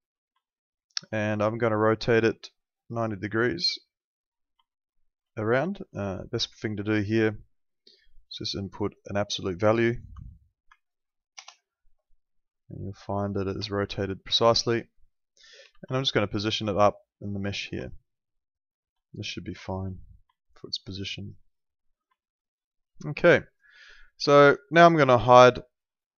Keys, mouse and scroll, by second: 0.5 alt+middle click, 1.2 e, 2.0 click, 4.7 alt+middle click, 5.7 alt+middle click, 13.0 ctrl+4, 13.7 alt+middle click, 15.6 w, 15.9 alt+middle click, 16.7 click, 17.9 alt+middle click, 19.9 middle click, 20.3 alt+middle click, 21.6 click, 22.2 alt+middle click, 24.9 click.